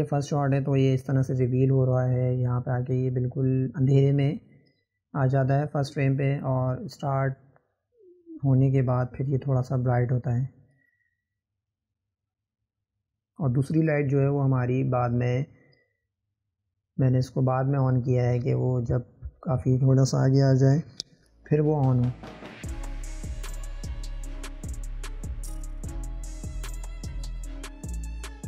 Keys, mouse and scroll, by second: 0.0 click, 0.6-2.9 middle drag, 2.9 click, 3.3-4.6 middle drag, 4.6-7.1 drag, 13.6-16.7 drag, 19.3 click, 24.3-26.9 drag, 28.0 click.